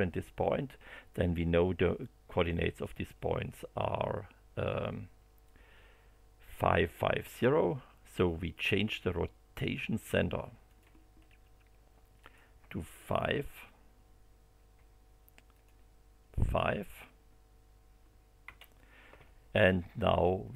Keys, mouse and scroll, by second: 10.6 click, 11.1 scroll down 2, 12.2 click, 14.7 5, 15.5 click, 16.5 5, 18.4 Return.